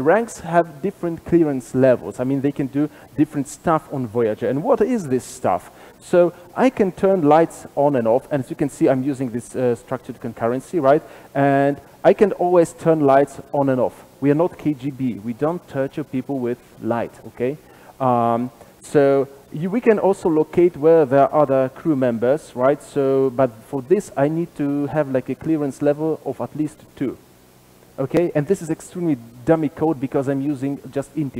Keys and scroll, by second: 5.3 super+b, 11.7 super+b, 18.0 super+[, 18.0 ctrl+alt+Left, 22.3 super+b.